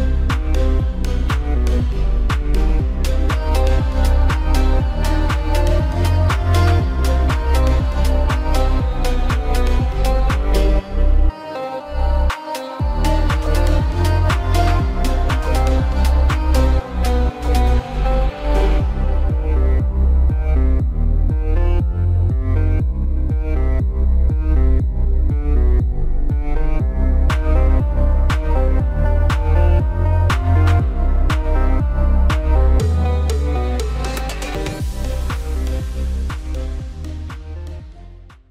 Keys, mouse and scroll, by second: 0.9 click, 1.2 click, 1.9 space, 2.0 click, 2.2 space, 4.2 ctrl+click, 4.6 click, 4.6 w, 4.8 click, 5.2 q, 5.3 click, 5.5 space, 5.7 click, 6.3 click, 6.5 click, 7.1 Escape, 7.4 click, 7.9 alt+middle click, 8.0 alt+click, 8.3 click, 8.7 click, 8.9 click, 9.7 Escape, 9.7 click, 10.5 click, 10.6 click, 11.0 middle click, 11.4 click, 12.3-13.0 scroll up 3, 12.4 middle click, 13.2 click, 13.8 click, 14.4 click, 14.5 middle click.